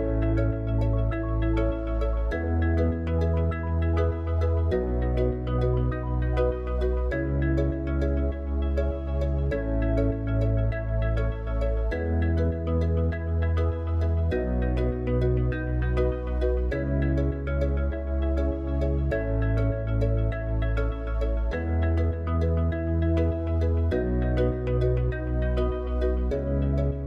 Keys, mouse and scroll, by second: 5.2 click, 8.1 click, 23.1 click, 25.2 Tab, 26.3 click.